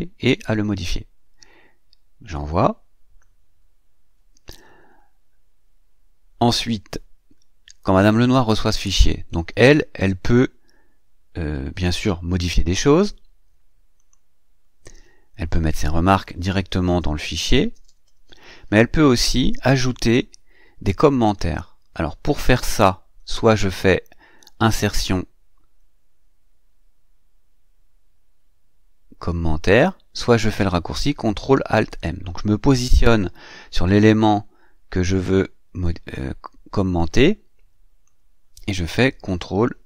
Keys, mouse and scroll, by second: 2.1 click, 13.8 click, 16.1-18.3 typing, 24.5 click, 32.1 click, 34.9-38.1 drag.